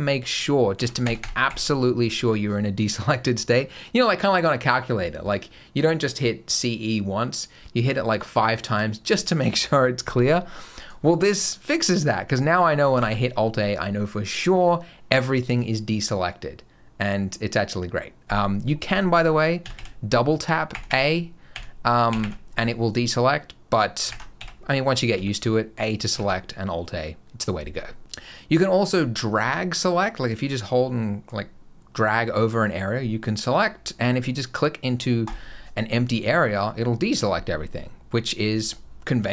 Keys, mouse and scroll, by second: 0.6 a, 0.9 a, 1.0 a, 1.3 a, 10.6 click, 12.8 alt+a, 19.5-22.0 typing, 23.9 alt+a, 25.0 a, 26.0 alt+a, 30.1 click, 35.1 click.